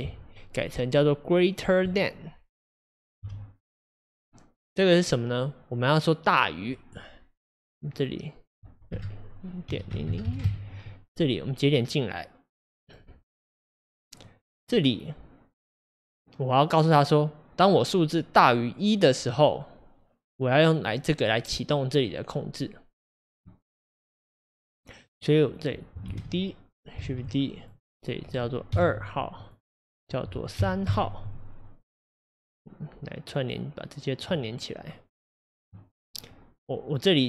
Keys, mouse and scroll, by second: 0.2-2.9 drag, 3.2 Delete, 4.0-12.9 drag, 14.2-26.1 drag, 26.1 shift+d, 27.1 shift+d, 29.2-33.6 drag, 35.6-37.2 drag.